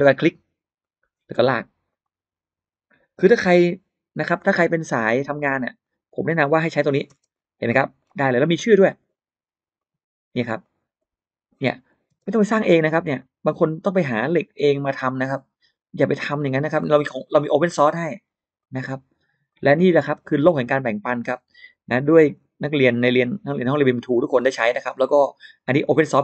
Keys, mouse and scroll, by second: 0.6 click, 1.7 click, 3.3 click, 4.8 click, 5.6 click, 6.5 click, 6.9-7.6 scroll up 1, 7.0 space, 7.5 middle click, 8.7 click, 9.6 click, 10.2 click, 10.5 click, 10.8 middle click, 11.9 space, 13.0 click, 14.1 middle click, 14.7 click, 16.1 click, 17.1 click, 18.4 click, 19.3 click, 20.0 space, 20.8 click, 20.8 space, 21.2 middle click, 21.9 middle click, 22.7 click, 23.5 click, 24.7 click, 25.7 click.